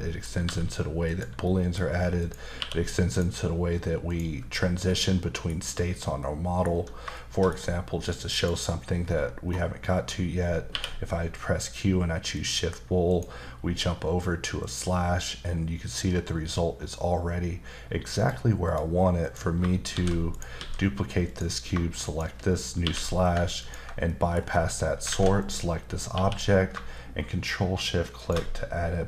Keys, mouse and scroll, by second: 0.4 g, 1.1 click, 1.5 middle click, 1.8-2.2 scroll up 1, 2.2 click, 2.6 q, 3.1 click, 4.1 click, 4.6-4.9 scroll down 1, 4.9 middle click, 5.6-6.2 scroll down 1, 6.2 middle click, 7.2 shift+middle click, 7.6 scroll up 2, 8.3 click, 10.7 q, 12.3 click, 13.1 click, 14.6 click, 18.2 click, 18.6 click, 19.9 shift+d, 20.3 right click, 20.6 s, 21.3 click, 22.1 shift+click, 22.8 q, 23.6 ctrl+click, 24.1 middle click, 24.4-25.0 scroll up 2, 25.1 alt+a, 25.4 click, 25.9 scroll up 1, 26.1 q, 28.2 ctrl+shift+click.